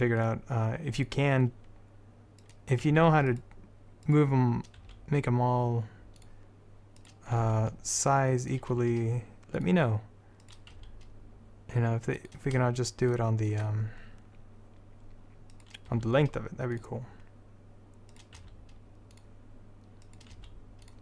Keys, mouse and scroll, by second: 0.3-2.6 middle drag, 2.6 click, 3.0 s, 5.0 s, 6.1-7.1 drag, 7.5 s, 8.9 g, 10.9 s, 13.3 middle click, 13.7 middle click, 16.1 s, 18.5 s, 20.5 s.